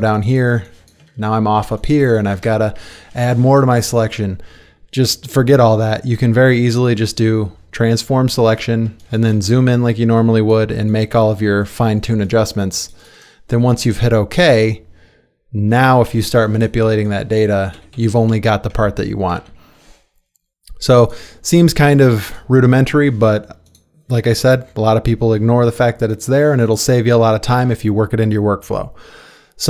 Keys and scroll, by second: 8.9 ctrl+space, 12.0 space, 16.1 ctrl+t, 17.7 Escape, 17.9 Escape, 18.1 Escape, 19.4 ctrl+d, 27.6 ctrl+d.